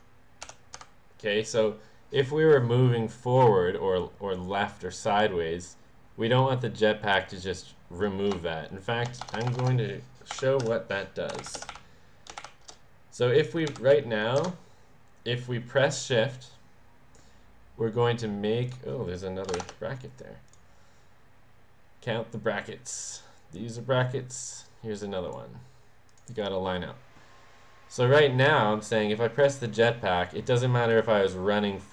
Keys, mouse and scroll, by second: 0.0-0.8 typing, 8.4 BackSpace, 9.3 BackSpace, 10.3-12.2 typing, 13.7 ;, 14.4 Return, 18.7 click, 19.6 shift+0, 20.5 click, 22.1-23.2 drag, 24.1-25.4 drag, 26.1 click, 29.4 click, 30.5 click.